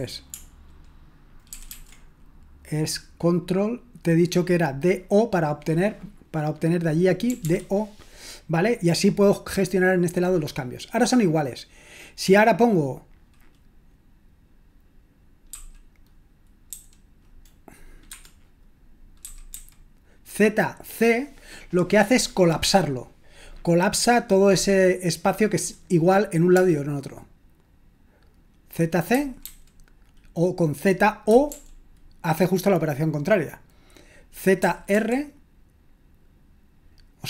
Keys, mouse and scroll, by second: 1.5 ctrl+w, 1.7 ctrl+w, 7.0-7.9 typing, 15.5 typing, 16.7 typing, 18.0 Escape, 19.2-19.5 typing, 29.1-29.4 typing, 31.0-32.0 typing, 34.6-34.9 typing.